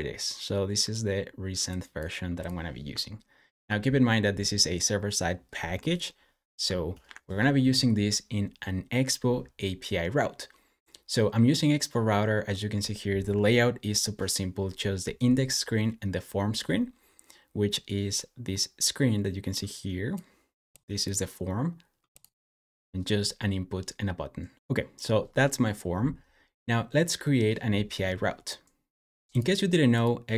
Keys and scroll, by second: 6.9 super+w.